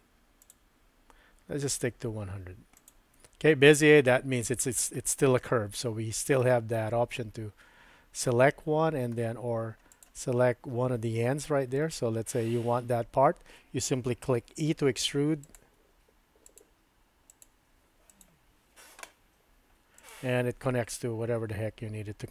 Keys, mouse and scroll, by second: 0.4 click, 2.7 click, 5.0-6.4 middle drag, 8.4 middle click, 9.9 click, 14.7 e, 15.7 e, 16.7 e, 17.5 e, 19.4 e.